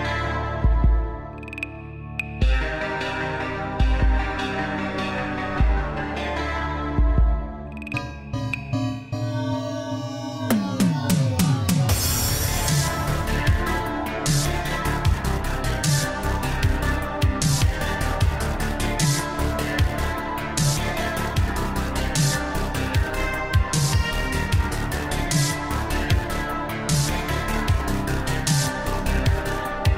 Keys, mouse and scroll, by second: 0.8 BackSpace, 3.3 space, 5.7 BackSpace, 7.5 space, 11.2 click, 13.6 F2, 14.1 click, 16.6 space, 20.3 space, 23.1 space, 25.6 BackSpace, 25.7 space.